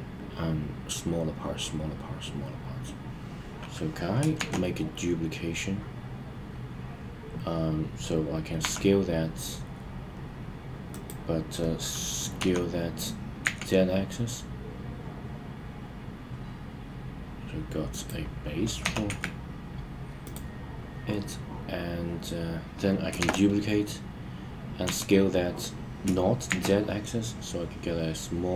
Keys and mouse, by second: 4.3 shift+d, 8.6 s, 10.8 click, 12.3 s, 13.4 z, 17.8 click, 18.8 g, 19.0 z, 20.2 click, 23.1 shift+d, 24.8 s, 26.4 shift+z.